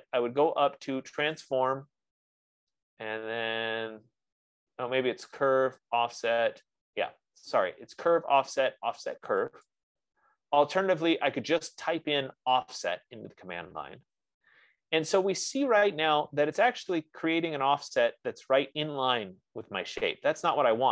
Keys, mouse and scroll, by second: 1.7-6.7 drag, 10.5-15.0 drag, 17.7-18.3 scroll up 1, 18.3-19.3 scroll up 3, 18.6 F15, 19.3-20.3 scroll.